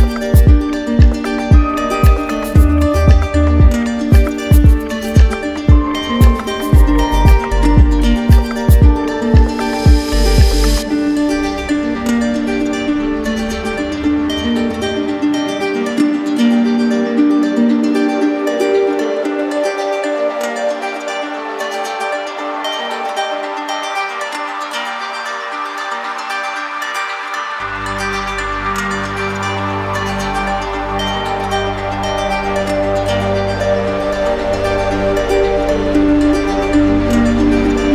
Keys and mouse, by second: 3.6-4.8 drag, 6.7-7.8 drag, 8.5-9.6 drag, 13.8-14.9 right drag, 16.1 click, 17.1-18.2 right drag, 18.9-21.4 drag, 21.4 right click, 24.7 ctrl+z, 26.5-27.6 right drag, 28.2-30.1 right drag, 32.0 alt+right click, 32.1 ctrl+z, 32.8 alt+right click, 33.4-36.1 right drag.